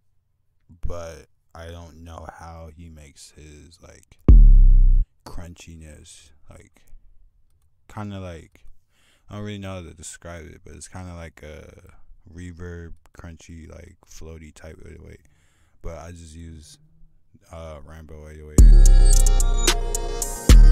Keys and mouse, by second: 6.6-7.4 drag, 7.2 F1, 15.9-16.2 drag, 16.5 F1, 16.5 click, 19.2 F1, 20.3 click.